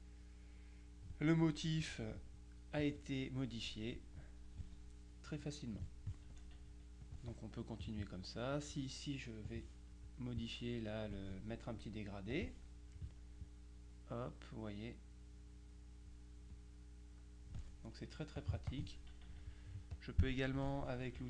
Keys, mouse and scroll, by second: 7.1 click, 7.9 click, 9.5 click, 10.5 click, 12.4 click, 13.5-16.7 drag, 18.5-19.4 drag, 19.3 middle click, 20.0 click.